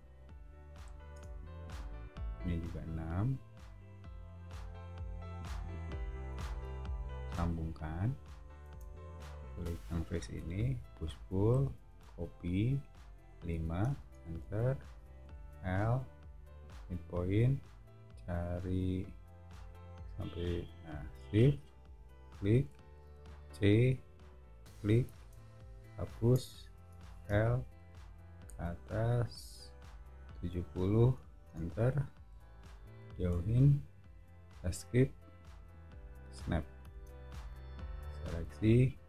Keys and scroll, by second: 0.0 6, 1.1 Return, 8.7 space, 10.3 p, 13.5 5, 14.0 Return, 15.2 l, 23.0 c, 25.1 space, 26.3 BackSpace, 26.9 l, 30.4-30.8 typing, 31.5 Return, 32.3 o, 34.3 Escape, 36.9 space.